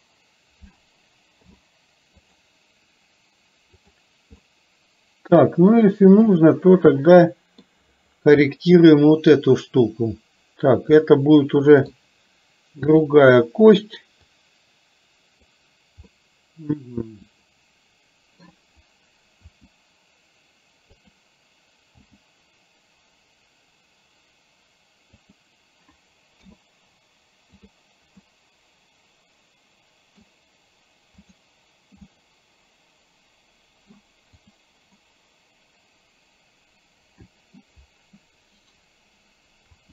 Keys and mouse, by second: 1.4 i, 3.9 click, 4.5-7.7 middle drag, 8.5 middle click, 11.1 middle click, 14.4-15.5 drag, 16.3-18.5 middle drag, 19.4 r, 22.2 g, 26.4 i, 28.3-30.3 middle drag, 31.3 click, 32.2-33.9 middle drag, 34.4 click, 35.1-37.8 middle drag, 38.2 middle click, 39.7 r.